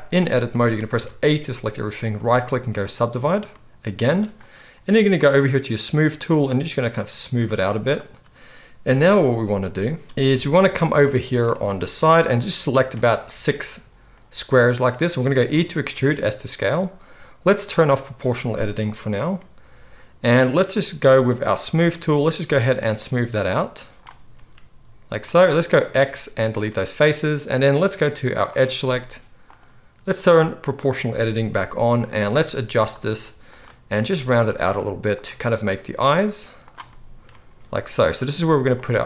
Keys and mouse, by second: 0.9 a, 2.2-5.6 right drag, 5.5 click, 5.5 middle click, 7.5-9.0 drag, 7.5-9.0 middle drag, 7.5-9.0 right drag, 8.8 KP_1, 10.0 click, 10.0 middle click, 10.0 right click, 10.3 KP_1, 11.5 alt+a, 13.3-14.4 drag, 13.3-14.4 middle drag, 13.3-14.4 right drag, 15.5 e, 16.6-18.0 drag, 18.2-19.3 drag, 19.3 middle click, 19.8 right click, 20.3-21.3 middle drag, 21.3-22.5 right drag, 22.5-25.2 middle drag, 24.3 s, 25.2-28.5 right drag, 25.9 x, 28.5-29.6 middle drag, 29.6-30.7 right drag, 30.7 middle click, 30.9-36.6 right drag, 31.6 g, 33.9 g, 35.1 click, 35.1 middle click, 35.4 g, 36.6 middle click, 36.7-38.7 right drag, 37.3 g, 38.7 middle click, 38.8-39.0 right drag.